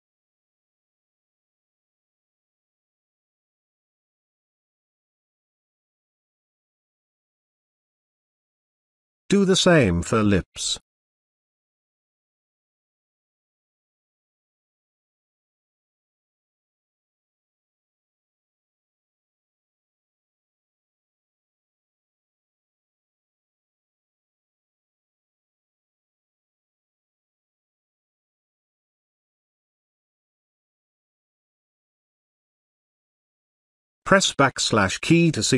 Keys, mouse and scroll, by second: 4.7-9.7 drag, 23.1-24.6 drag, 27.1 space, 27.3-28.6 ctrl+drag, 31.3 space, 31.4-32.6 ctrl+drag.